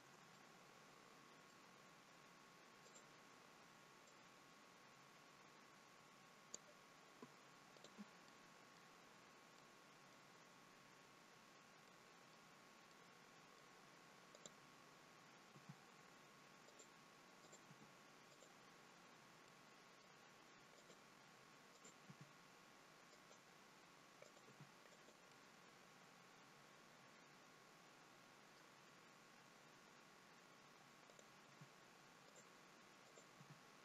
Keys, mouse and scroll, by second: 0.4 middle click, 2.9 click, 4.1 click, 7.8 click, 8.3 middle click, 9.6 middle click, 11.9 middle click, 13.0 middle click, 14.4 click, 15.5 g, 17.4 click, 17.8 g, 19.5 middle click, 20.9 click, 21.8 click, 22.2 g, 24.3 click, 24.5 g, 25.4 middle click, 31.1 click, 31.5 g, 33.1 click, 33.4 g.